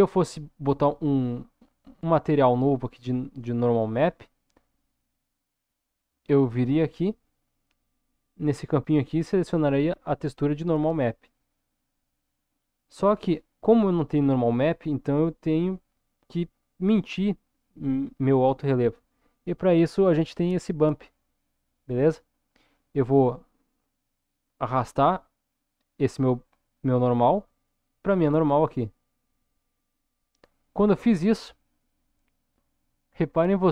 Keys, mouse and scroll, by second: 12.5 middle click, 23.5 middle click, 27.2-30.1 drag.